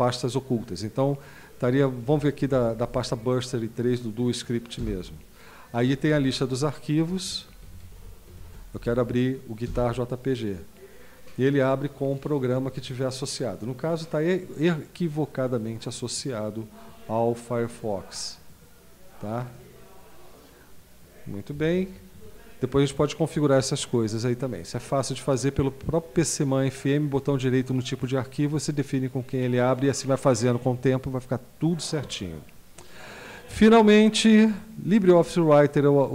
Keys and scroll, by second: 2.1 Down, 2.5 Up, 4.8 Return, 6.0 Down, 6.7 Down, 6.9-7.5 Down, 7.8 Up, 8.0 Up, 8.3 Down, 8.5 Down, 9.7 Return, 21.8 super+q.